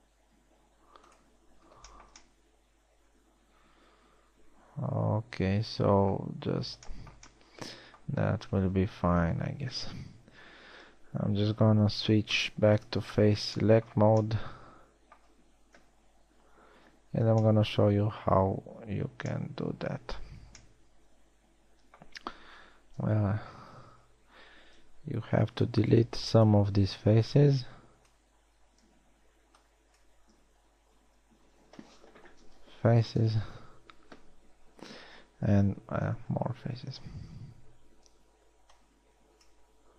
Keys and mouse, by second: 1.0 t, 2.1 t, 4.7-5.1 middle drag, 5.3 middle click, 9.0 Tab, 10.5 KP_1, 12.5 ctrl+Tab, 13.8 z, 16.9 KP_1, 20.7 z, 23.7 KP_1, 24.3 z, 25.9 b, 27.9 b, 30.2 b, 31.5 z, 31.9 x, 36.9 KP_1, 37.9 z, 38.9 b.